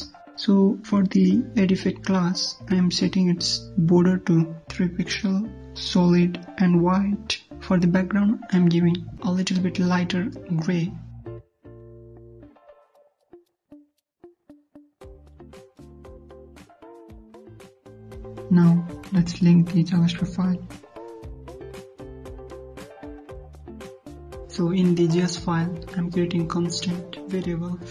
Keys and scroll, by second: 7.7 ctrl+s, 24.2 ctrl+s.